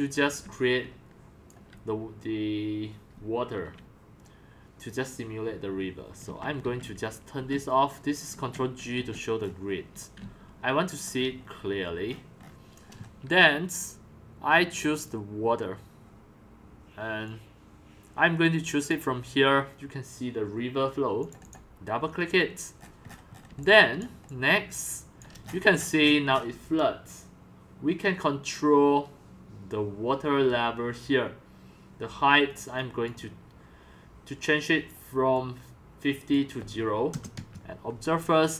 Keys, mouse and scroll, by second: 0.0-1.9 typing, 6.3 ctrl+g, 6.6 ctrl+g, 7.4 ctrl+g, 8.3 ctrl+g, 8.9 ctrl+g, 9.4-9.9 scroll down 5, 9.9-11.5 typing, 11.4-13.2 shift+scroll, 14.9 click, 16.2 right click, 17.2-19.9 drag, 21.2 click, 22.8 middle click, 22.8-23.6 scroll, 24.1 c, 24.4 drag, 24.6-25.2 c, 25.4 c, 25.6 shift+click, 32.5 click, 34.6-37.1 drag, 37.1 0, 37.4 Return.